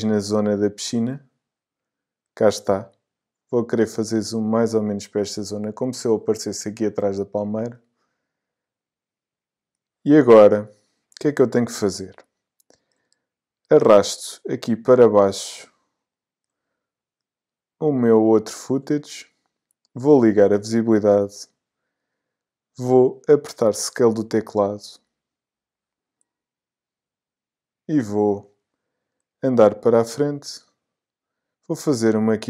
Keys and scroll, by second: 22.9 s.